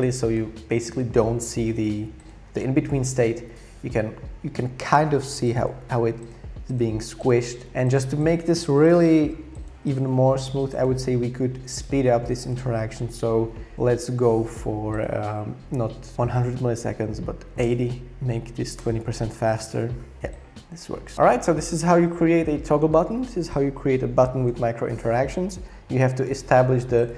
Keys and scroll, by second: 17.1-18.9 typing, 17.6 Return.